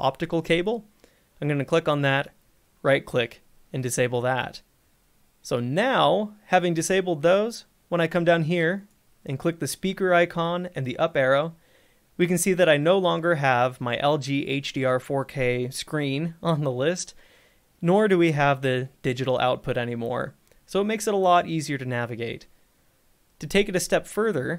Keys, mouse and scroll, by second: 2.5 right click, 3.9 click, 9.0 click, 13.1 scroll, 19.9 scroll, 20.9 scroll, 24.2 scroll.